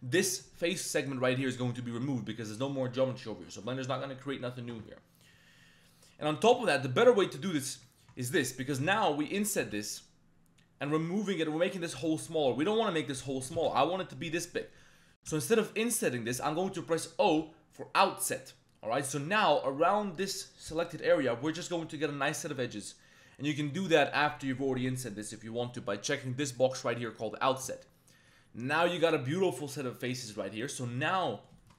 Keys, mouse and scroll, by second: 1.0 middle click, 1.9 middle click, 2.7 middle click, 4.9 middle click, 5.9 middle click, 7.2 click, 8.9 ctrl+a, 9.0 ctrl+z, 9.6 i, 13.6 ctrl+z, 15.2 i, 17.2 o, 23.9 middle click, 26.5-27.8 drag, 27.8 middle click, 30.6 click, 30.9 shift+click, 31.2 click, 31.6 shift+click.